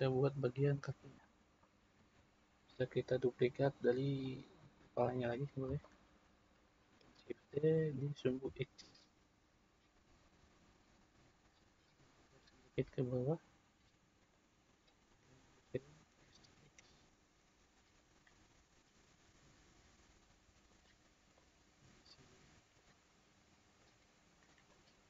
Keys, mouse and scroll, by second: 0.8-1.7 scroll up 2, 1.7-5.1 middle drag, 5.1-5.8 drag, 5.8-7.3 shift+middle drag, 7.3 shift+d, 12.2 click, 13.1-13.8 drag, 15.6 s, 19.4 s, 21.3 click, 23.7 click, 24.7-25.0 middle drag.